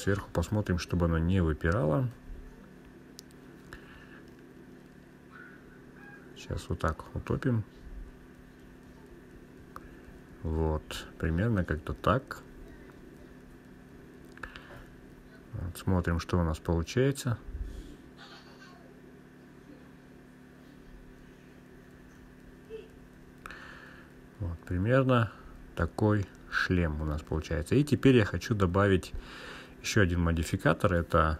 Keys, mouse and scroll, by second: 1.4 click, 2.8-4.5 scroll up 4, 6.3 g, 6.7 Left, 7.1 Left, 7.4 Left, 7.6 Left, 7.8 Left, 7.9 Left, 8.0 Left, 8.2 Left, 8.4 Left, 8.9 Down, 10.0 Down, 10.5 Left, 10.8 Left, 11.8 Return, 13.8-15.6 drag, 16.0 scroll up 1, 16.2-17.4 scroll down 2, 17.4 click, 19.2 click, 20.7 click, 20.9-22.2 drag, 22.9-24.4 drag, 25.5 click, 28.1-30.6 drag.